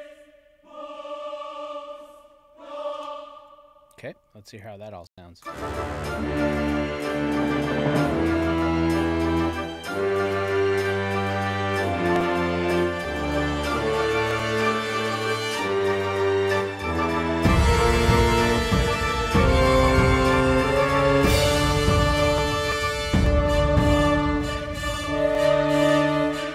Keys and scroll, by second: 3.0 space, 5.1 space.